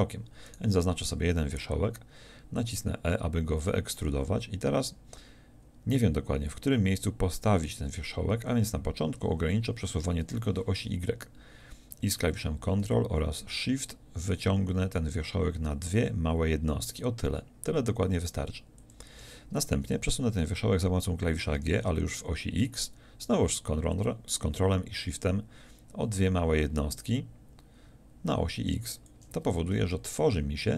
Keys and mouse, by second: 4.8 e, 18.9-21.5 drag, 21.5 g, 29.1-30.3 drag, 30.3-30.7 middle drag.